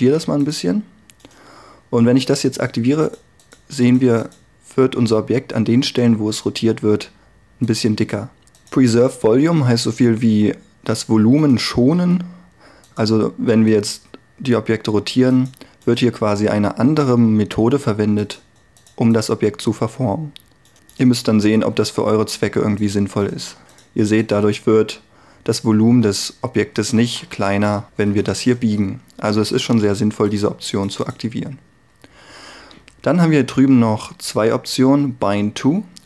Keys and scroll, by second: 12.0 r, 12.7 r, 21.8 r, 27.9 3, 29.5 3.